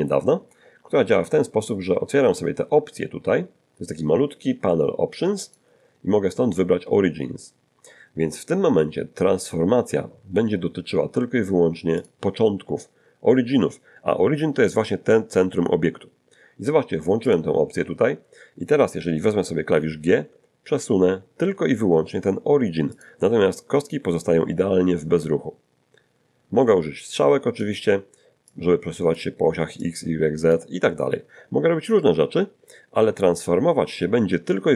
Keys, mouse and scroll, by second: 0.8 n, 5.4 click, 12.0 click, 17.3 click, 20.2 g, 23.0 click, 27.1 click, 28.5 click, 29.8 click.